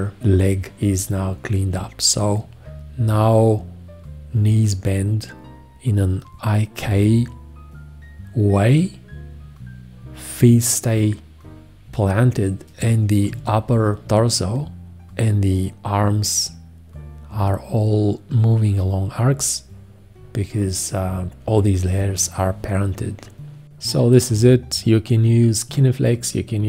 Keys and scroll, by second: 13.3 F1.